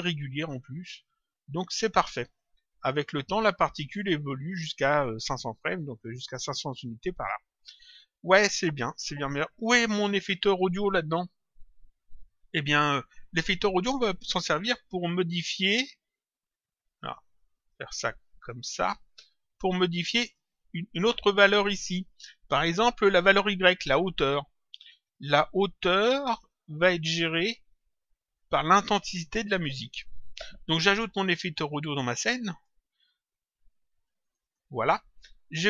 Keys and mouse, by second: 2.9 click, 6.4 click, 8.5 click, 16.2 click, 18.3 click, 31.6 click, 34.2 ctrl+click.